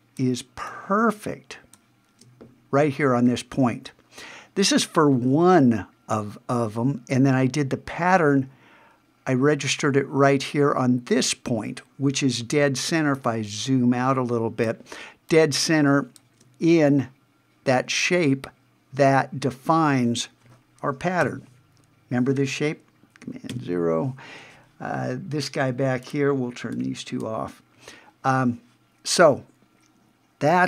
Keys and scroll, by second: 13.0 super+space, 21.2 super+=, 23.5 super+0.